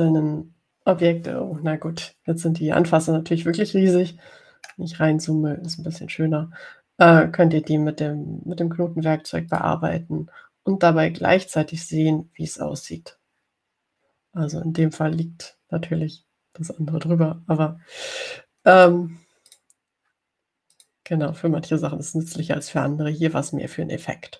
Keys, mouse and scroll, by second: 0.3 click, 5.3-5.7 ctrl+scroll up 2, 6.0 ctrl+scroll up 2, 10.7 click, 20.0 click, 20.7 click, 21.9 click.